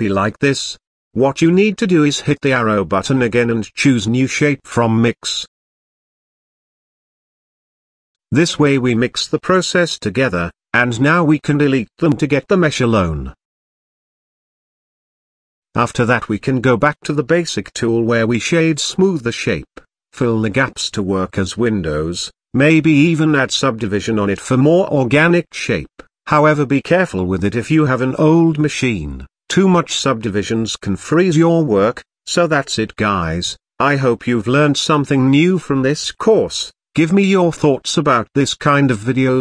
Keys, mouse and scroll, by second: 0.1 click, 1.5 ctrl+z, 1.9 ctrl+z, 2.4 drag, 2.9 click, 4.1-8.0 drag, 9.7 click, 10.6 click, 14.1 click, 15.0 click, 17.0 click, 17.3-17.8 middle drag, 17.8-18.5 scroll up 3, 18.5-18.8 scroll down 2, 18.8-20.1 middle drag, 20.1-20.8 scroll up 1, 20.8-21.4 scroll down 1, 21.4 click, 22.4-23.3 right drag, 23.3 click, 23.7 click, 24.0-24.6 middle drag, 24.6 scroll up 1, 24.9 Tab, 25.8-26.4 middle drag, 26.4-27.0 scroll up 2, 27.0-27.9 scroll up 1, 27.9-28.7 scroll down 1, 28.7 middle click, 29.6-30.2 scroll up 2, 30.7-31.1 scroll down 3, 31.1-31.7 middle drag, 31.7 scroll up 2, 32.9 f, 33.7-34.1 scroll down 1, 34.1-34.6 middle drag, 34.6-35.2 scroll up 1, 36.5 right click, 37.2 3, 38.0-39.4 right drag.